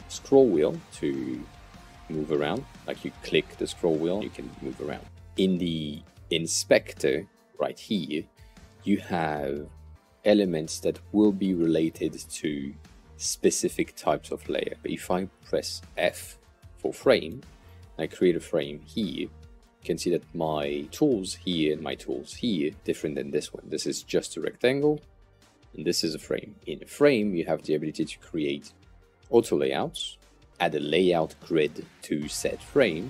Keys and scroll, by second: 15.2 f.